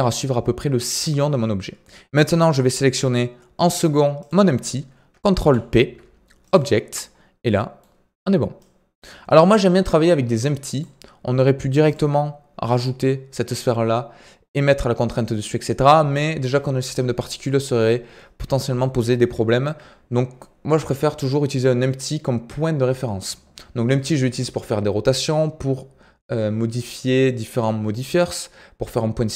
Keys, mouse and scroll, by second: 4.1 shift+click, 5.4 ctrl+p, 6.9 scroll down 4, 7.4-8.5 middle drag, 8.5-14.8 drag, 17.4-17.8 middle drag, 17.8 scroll up 2.